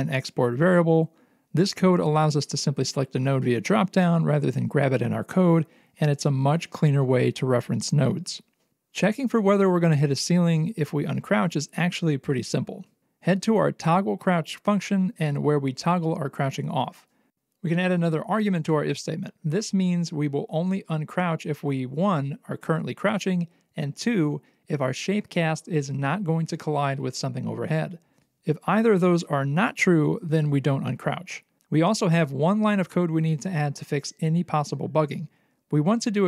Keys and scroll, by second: 3.5 ctrl+s, 4.4 alt+x, 6.3 alt+x, 8.1 alt+x.